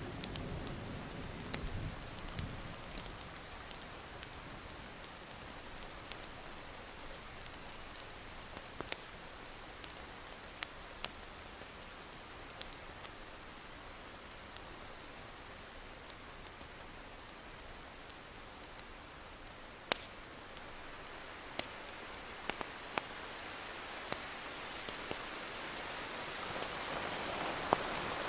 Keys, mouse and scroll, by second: 0.2 click, 2.2 ctrl+z, 2.9-5.1 drag, 5.2 alt+scroll down 1, 5.3-5.7 scroll up 2, 6.2-10.4 drag, 10.5 ctrl+z, 10.9-12.7 drag, 12.9 alt+scroll down 1, 13.2 alt+scroll up 1, 13.9-21.2 drag, 22.0-22.6 alt+scroll down 2, 22.2 click, 22.6 ctrl+scroll up 1, 23.1 alt+scroll down 1, 25.3 click, 26.9 Delete, 27.5 click.